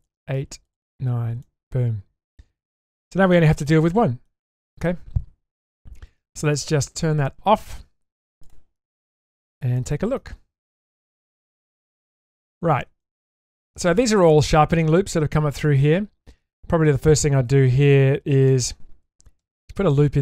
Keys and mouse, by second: 15.3 middle click, 19.4 ctrl+r.